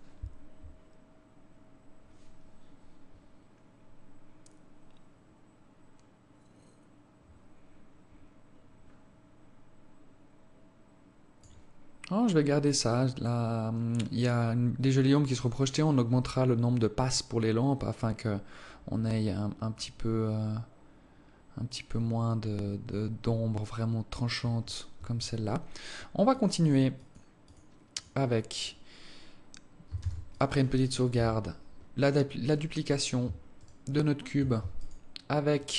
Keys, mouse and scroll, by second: 28.3 click, 30.3 ctrl+s, 31.4 KP_7, 32.8 right click, 33.9 shift+right click, 35.1 shift+right click.